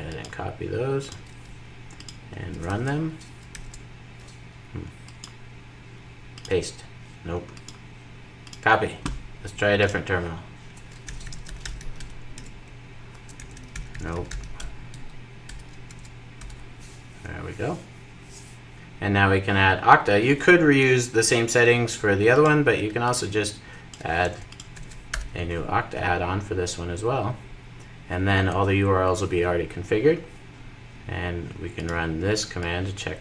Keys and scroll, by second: 0.8 super+c, 8.3 super+c.